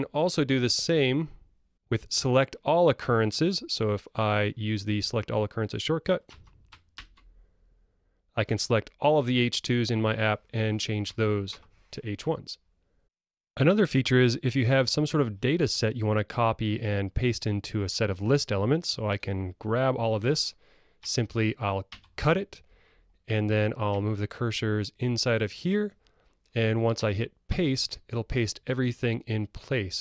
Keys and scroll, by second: 7.0 ctrl+alt+super+g, 21.9 super+x, 27.6 super+v.